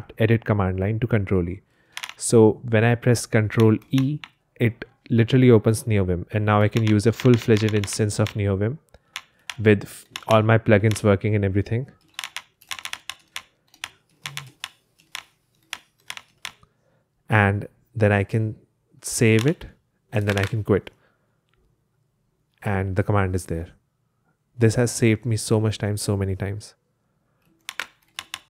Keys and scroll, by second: 1.9 super+l, 3.9 ctrl+e, 6.4-16.5 typing, 8.1 Escape, 15.1 Escape, 19.3 ctrl+s, 20.2-21.8 typing, 27.7 super+space, 27.8-28.5 typing.